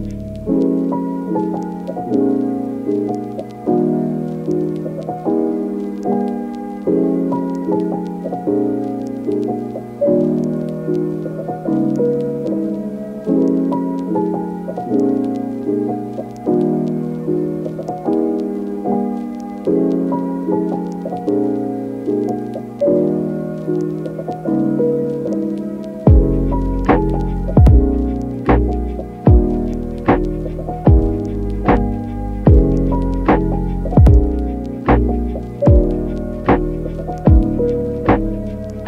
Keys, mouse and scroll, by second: 0.0-3.2 typing, 2.8 ctrl+z, 3.0 ctrl+z, 4.1 click, 4.3-5.4 typing, 6.7-8.6 typing, 8.1 click, 10.4 click, 10.5-16.1 typing, 13.8 click, 14.1 click, 14.5 click, 15.8 right click, 17.6 ctrl+right click, 17.9 f, 18.3 right click, 19.2 ctrl+click, 20.2 f, 24.2 ctrl+click, 25.1 f, 26.9 ctrl+click, 27.5 f, 27.9 g, 29.5 e, 29.8 e, 30.7 g, 30.9 y, 32.1 g, 32.4 y, 33.4 g, 33.4 y, 34.3 e, 34.8 click, 35.2 e, 35.9 middle click, 36.4 Tab, 37.4 middle click.